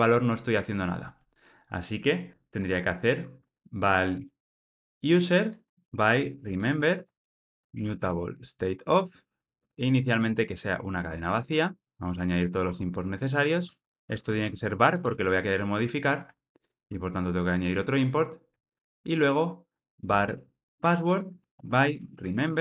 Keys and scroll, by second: 8.9 Return, 12.0 alt+Return, 16.6 alt+Return.